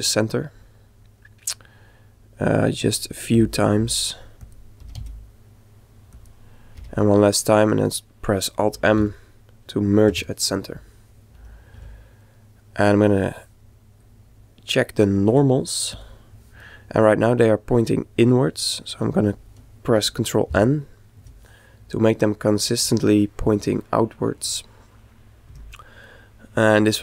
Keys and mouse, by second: 3.3 e, 4.8 e, 6.8 e, 8.5 alt+m, 11.4 a, 11.7 a, 12.4-14.0 middle drag, 14.0 click, 15.9 click, 17.1-18.4 middle drag, 20.1 ctrl+n, 22.0-25.3 middle drag, 25.5 Tab, 26.1-27.0 middle drag.